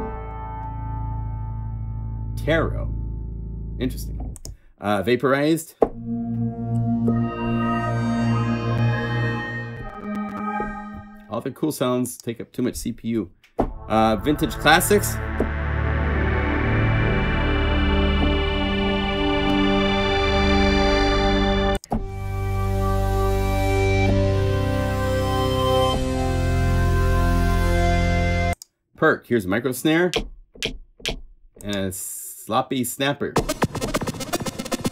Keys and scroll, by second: 25.9 F4.